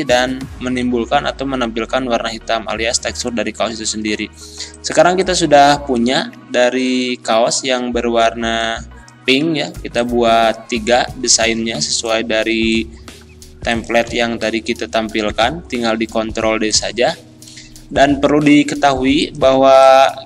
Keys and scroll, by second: 9.7 z, 14.9 ctrl+d.